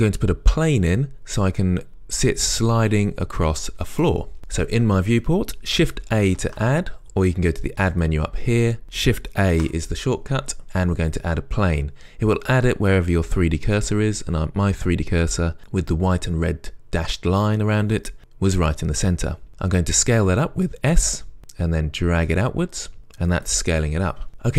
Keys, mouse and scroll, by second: 11.3-24.5 drag, 11.3 shift+a, 20.5 s.